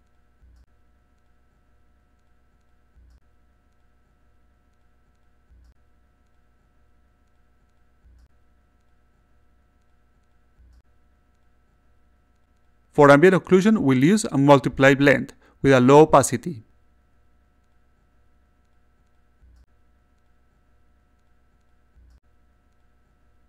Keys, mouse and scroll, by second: 1.2-2.3 drag, 3.2-4.4 drag, 5.4 click, 8.4 click, 9.2-10.5 drag, 13.3 click, 13.7 click, 16.2-17.5 drag, 18.7-19.7 drag, 22.2 click, 23.0 click.